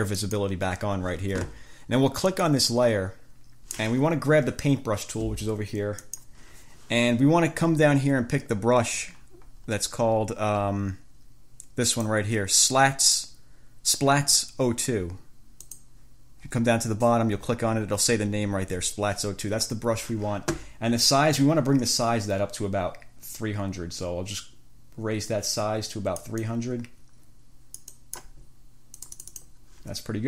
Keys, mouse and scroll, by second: 0.4 click, 2.5 click, 6.2 click, 8.7-9.4 scroll down 1, 9.6-10.1 scroll down 1, 10.4-11.0 scroll down 2, 12.0 click, 15.8 click, 16.6-17.0 scroll down 1, 22.2-28.5 drag, 29.2 click.